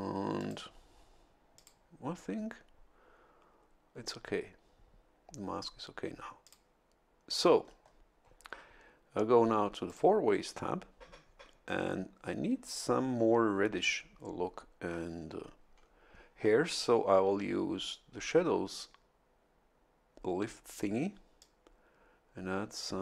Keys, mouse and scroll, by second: 0.3 click, 1.5 click, 6.4 click, 7.4-8.0 scroll up 1, 9.8 click, 21.4-23.0 drag.